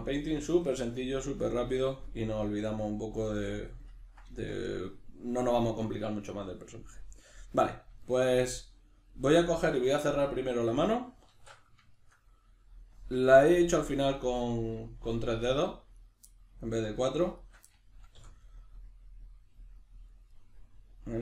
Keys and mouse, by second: 11.3 alt+q, 16.0 right click, 16.3-17.4 middle drag, 17.4 shift+right click, 17.7-21.2 middle drag, 18.2 f.